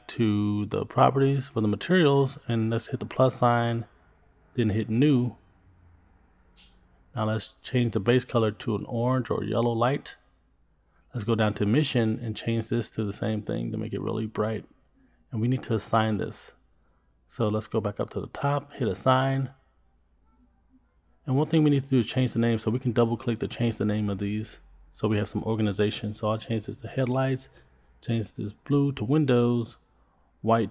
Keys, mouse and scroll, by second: 0.5 click, 1.2-4.5 scroll up 7, 4.5 click, 6.1 click, 7.8 click, 9.6 middle click, 10.2-11.4 scroll down 9, 11.4 click, 13.6 middle click, 14.0 Tab, 14.4 Tab, 14.8-15.5 scroll up 2, 17.8-19.6 scroll up 4, 19.7 click, 22.5 click, 22.7-26.7 drag, 27.3 click, 27.4-30.0 drag, 30.1 click, 30.2-30.7 drag.